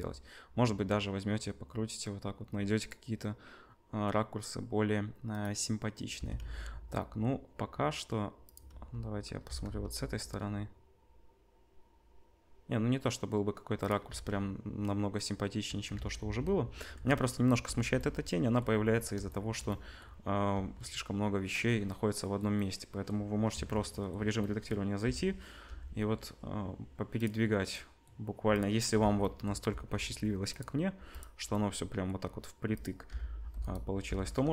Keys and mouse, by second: 6.1 r, 8.6 middle click, 8.7 z, 9.4 r, 14.0 z, 15.7 ctrl+middle click, 15.9 ctrl+z, 16.2 ctrl+z, 20.5 z, 23.5 Tab, 25.0 l, 25.6 g, 28.9 l, 29.7 g, 30.9 g, 32.8 click, 33.1 k, 34.0 l.